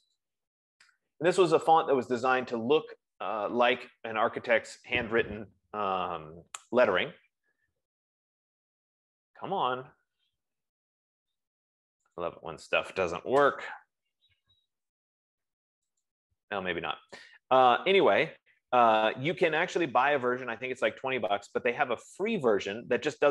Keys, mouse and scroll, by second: 0.5 click, 2.5 F15, 12.7 click, 13.8 Return, 16.7 click.